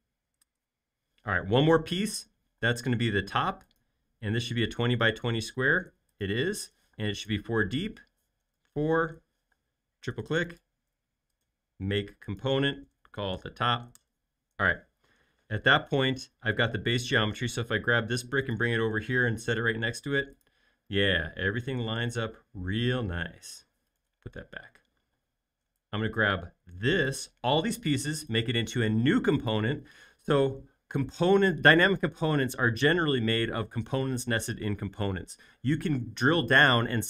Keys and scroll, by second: 0.4 Return, 2.4 r, 6.9 p, 8.1-9.5 typing, 12.9-14.0 typing, 17.6 m, 23.9 super+z, 25.2 space.